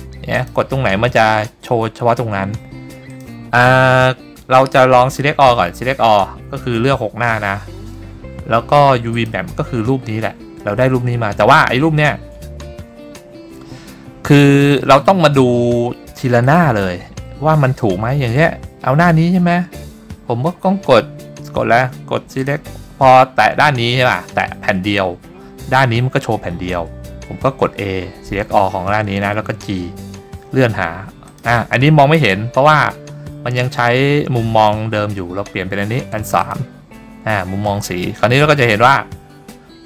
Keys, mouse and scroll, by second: 0.5 click, 3.2 click, 5.7 a, 9.3 click, 16.6 click, 22.5 click, 24.1 click, 27.9 a, 29.8 g, 31.4 click, 33.7-36.6 scroll down 10, 36.6 click, 38.5 scroll up 1, 39.6-39.8 scroll up 1.